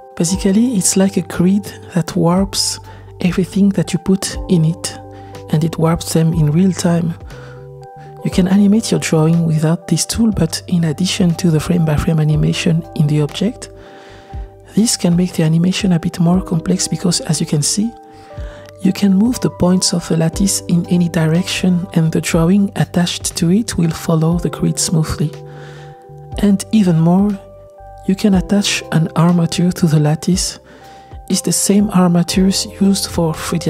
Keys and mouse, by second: 0.0-1.6 drag, 1.6-7.5 typing, 2.6 click, 2.8 click, 3.1 Tab, 3.2 click, 3.4 middle click, 3.6 Tab, 3.7 shift+middle click, 4.0 click, 4.2 Tab, 4.4 Tab, 4.8 click, 5.1 Tab, 5.2 click, 5.4 middle click, 5.5 Tab, 5.6 shift+middle click, 5.9 click, 6.7 middle click, 6.9 middle click, 7.3 Tab, 7.7 middle click, 7.9 shift+middle click, 8.9 g, 12.4 click, 12.9 g, 15.1 click, 15.6 space, 17.6 g, 20.1 click, 21.0 g, 26.1 click, 26.3 g, 27.7 g, 28.7 click, 33.4 r.